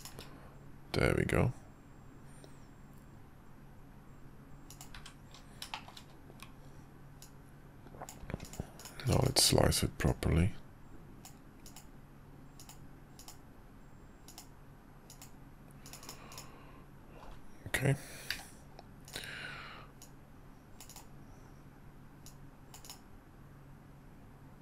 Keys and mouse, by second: 4.9 `, 5.7 middle click, 7.2-8.1 drag, 10.1 click, 18.3 d, 20.0-21.0 drag, 22.3 click.